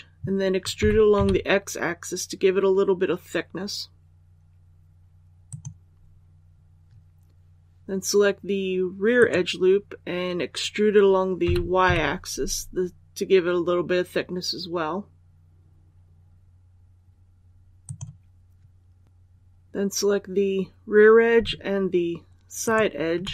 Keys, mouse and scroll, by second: 0.7-1.0 typing, 5.3 click, 9.0 right click, 11.3-11.7 typing, 17.7-18.8 drag.